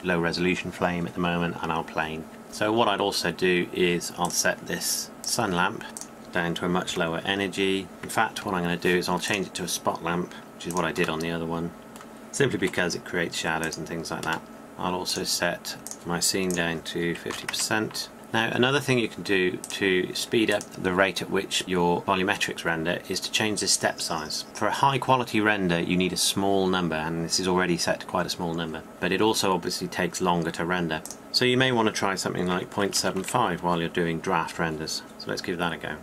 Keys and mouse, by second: 0.5-7.5 drag, 7.9 r, 10.2 r, 18.1-19.8 middle drag, 19.8-22.0 drag, 22.0-31.2 middle drag, 31.2-36.0 drag.